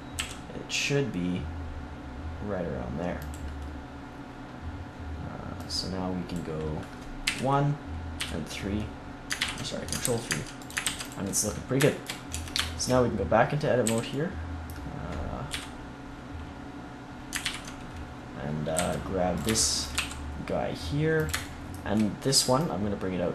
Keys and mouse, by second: 0.1 g, 3.3-7.2 drag, 7.2 KP_1, 8.1 KP_3, 9.3 ctrl+KP_3, 10.0 s, 10.8 ctrl+s, 12.3 Tab, 13.8 a, 15.4 KP_3, 17.4 ctrl+KP_3, 18.7 c, 19.3 click, 19.9 e, 22.3-23.3 drag.